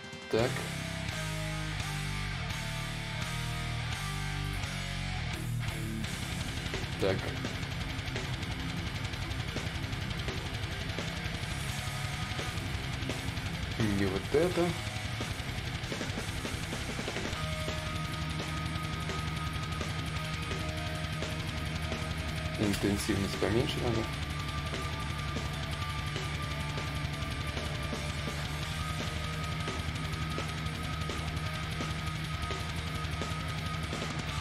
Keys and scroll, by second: 5.6 s, 20.2 ctrl+z, 20.2 /, 20.9 space, 22.5-23.2 typing, 25.1 s, 25.7 ctrl+z, 29.1 s.